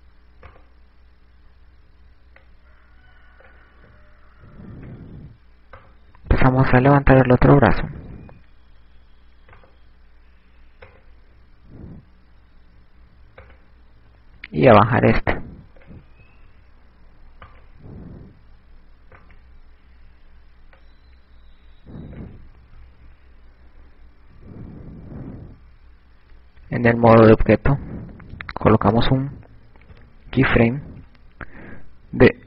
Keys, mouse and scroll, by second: 1.1 right click, 4.4 click, 8.0 right click, 9.0 click, 9.8 i, 11.4 right click, 15.1 right click, 16.8 click, 18.1 i, 19.1 right click, 22.8 click, 24.5 i, 27.5 ctrl+Tab, 30.9 i, 32.1 i.